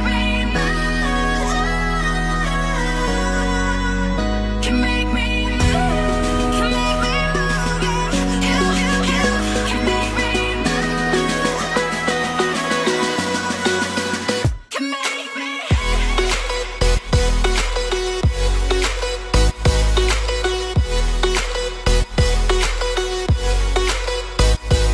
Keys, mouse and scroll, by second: 4.4 Tab, 4.9 Tab, 6.3-7.7 scroll up 7, 10.9 Tab, 11.3 Tab, 16.1 scroll down 4, 16.4 shift+middle click, 18.5 Tab, 18.9 Tab, 19.3 Tab, 19.7 Tab, 20.0 Tab, 21.2 Tab, 21.6 Tab, 24.8 scroll down 1.